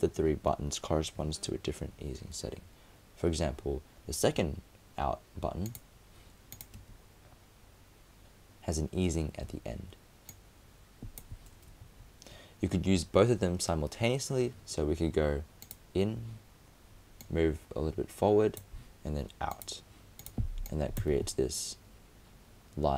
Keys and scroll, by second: 11.8 super+z.